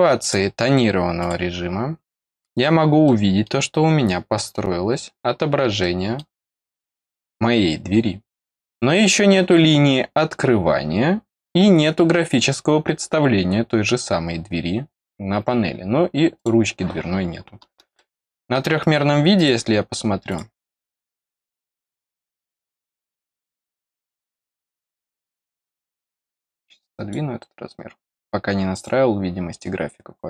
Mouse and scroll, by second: 0.1 click, 1.1 click, 2.2 click, 3.0 middle click, 4.9-5.3 scroll down 2, 5.7 middle click, 7.0 scroll up 1, 16.3 click, 17.1-17.4 scroll down 4, 17.9 middle click, 19.3 click, 20.2 click, 21.5 click, 24.9 click, 26.4 click, 28.7 click, 30.1-30.2 scroll up 4.